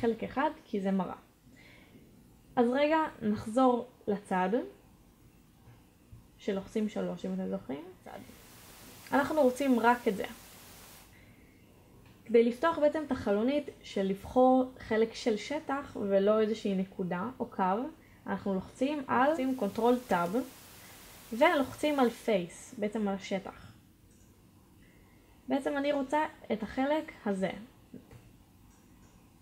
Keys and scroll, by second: 2.6 shift+a, 4.4 3, 23.5 ctrl+Tab.